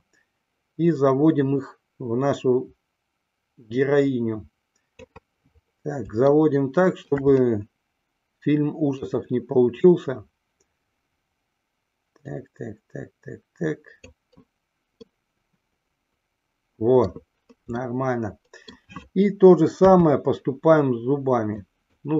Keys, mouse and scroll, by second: 0.4-5.5 drag, 6.7-7.4 shift+middle drag, 9.3-14.5 drag, 15.4-17.6 middle drag, 18.2-19.0 middle drag, 20.0 KP_3, 21.8-22.1 drag.